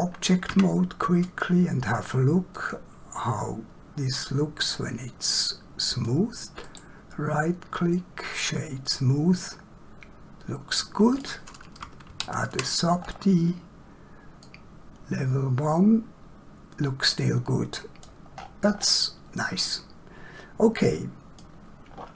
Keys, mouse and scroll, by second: 0.6 Tab, 1.2 click, 4.6 middle click, 6.7 right click, 7.6 click, 8.9 middle click, 12.0 ctrl+1, 13.1 scroll up 1, 14.4 middle click, 18.4 scroll down 1, 19.7 middle click, 21.9 scroll down 1.